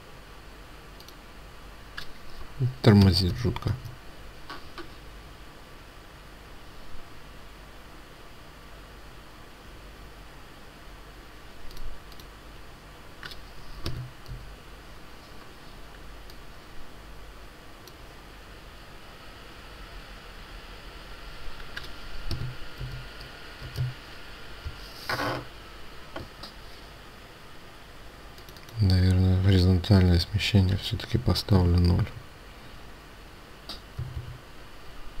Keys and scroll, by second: 3.6 Tab, 23.6 Return, 31.5 ctrl+a, 33.8 Delete, 34.1 Delete.